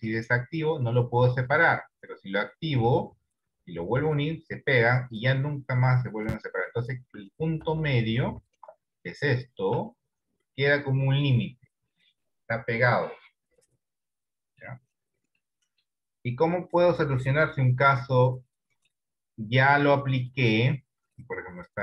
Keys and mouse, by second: 0.0 click, 1.0 click, 2.9 click, 4.0 click, 5.3 click, 5.8 click, 6.2 click, 6.7 middle click, 7.4 shift+middle click, 10.0 shift+middle click, 14.1 middle click, 15.5 middle click, 17.6 KP_1, 18.6 middle click, 20.3 click.